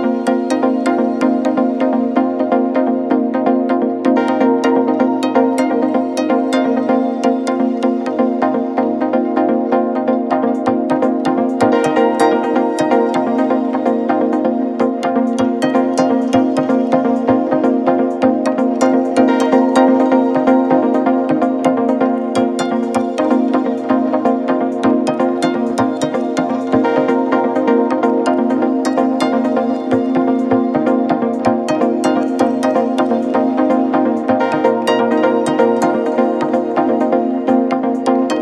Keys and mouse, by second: 7.2 s, 7.6 middle click, 8.1-15.8 drag, 14.4 KP_1, 14.4 KP_3, 15.3-24.2 middle drag, 15.3 r, 15.9 g, 20.6 shift+d, 21.3-28.8 drag, 28.8-30.4 middle drag, 30.4-33.7 shift+drag, 33.7-34.8 middle drag, 34.3 shift+d, 34.8-37.9 drag, 37.2 s, 37.9 middle click.